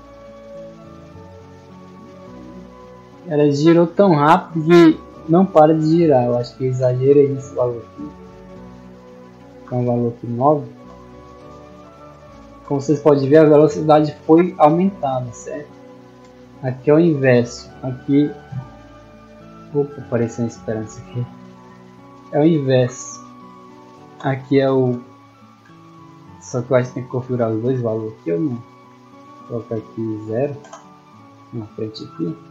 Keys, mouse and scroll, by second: 7.4 click, 11.4-15.1 typing, 21.5 click, 24.3-27.3 typing, 29.5 click, 32.3 a.